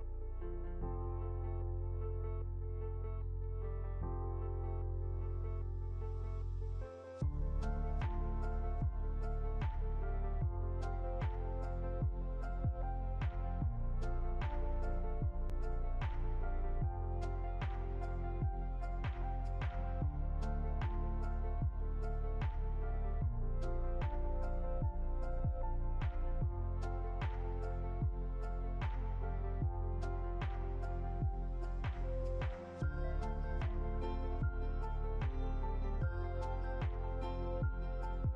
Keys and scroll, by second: 10.2 Delete, 16.8 ctrl+z, 19.6 ctrl+2, 20.4 ctrl+z, 21.4 ctrl+2, 37.3 Up.